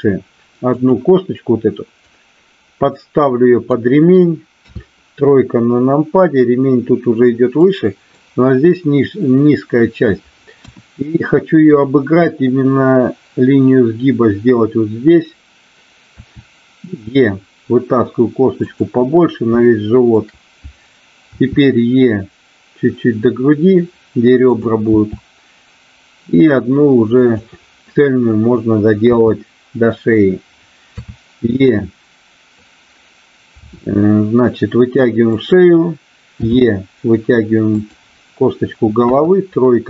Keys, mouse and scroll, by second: 0.7 click, 2.1-3.6 drag, 4.6 KP_3, 7.6 middle click, 10.6 KP_1, 16.1 e, 19.6 shift+middle click, 21.3 e, 25.0 e, 27.2 click, 29.0 KP_3, 30.8 KP_3, 33.6 e, 35.2 click, 36.3 e, 37.7 click, 39.1 KP_1.